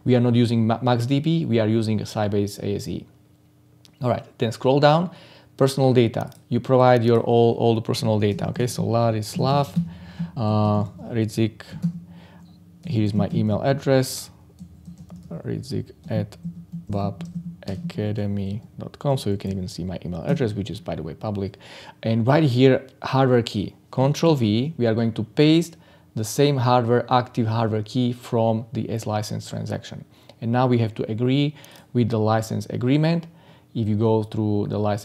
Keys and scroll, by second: 24.2 ctrl+v.